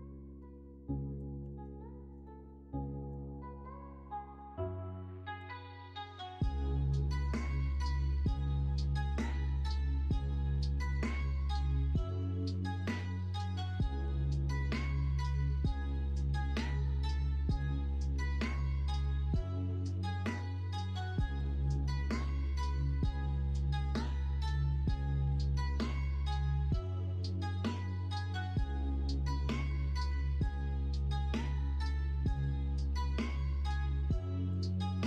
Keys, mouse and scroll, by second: 1.5 ctrl+z, 4.4-7.9 drag, 8.4 shift+middle click, 9.0 middle click, 9.4 alt+z, 9.8 middle click, 10.3 3, 10.8 middle click, 11.4 click, 11.7 middle click, 12.8 middle click, 13.3 x, 14.3 alt+z, 14.8 middle click, 15.9 middle click, 16.4 middle click, 17.3 s, 18.4 ctrl+z, 19.1 l, 21.8 KP_1, 22.0 KP_3, 22.3 alt+z, 24.4-28.4 drag, 28.4 s, 31.1-35.0 drag.